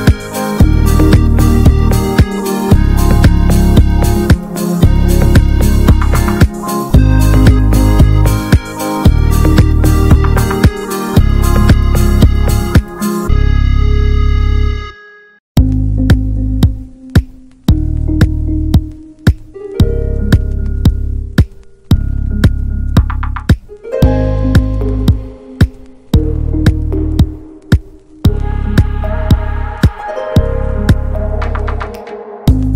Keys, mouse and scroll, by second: 0.0 click, 0.2-2.2 middle drag, 2.2 click, 2.4 shift+middle click, 3.3 click, 3.7 middle click, 4.5 click, 4.7-7.0 middle drag, 7.0 click, 7.5-7.8 scroll up 2, 7.8-9.2 middle drag, 9.2 click, 9.9 click, 10.3 shift+middle click, 10.6 click, 10.7 Tab, 11.5 click, 12.0 scroll down 1, 12.3 middle click, 12.7 s, 13.8 Tab, 14.0 click, 14.2 shift+middle click, 14.8-15.1 scroll up 4, 15.1 middle click, 15.9-16.4 scroll up 1, 16.4-18.5 middle drag, 18.5-18.8 scroll down 7, 18.8 shift+middle click, 19.5 click, 20.7 `, 20.9-22.3 middle drag, 22.3 alt+h, 22.8-24.3 middle drag, 24.7 click, 25.6-26.0 scroll up 1, 26.0 shift+middle click, 26.7 click, 26.9 t, 27.6 ctrl+middle click, 27.9 ctrl+s.